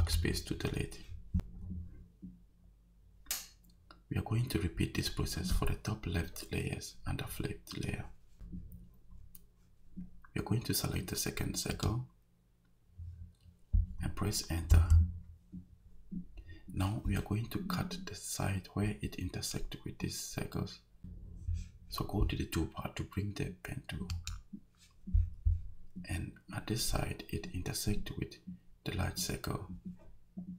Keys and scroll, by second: 14.7 Return.